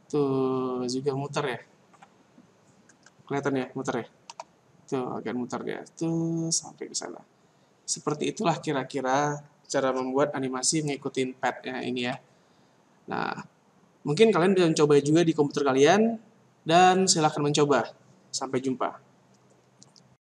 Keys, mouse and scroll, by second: 2.9 Escape, 4.1 alt+a, 8.1 Escape.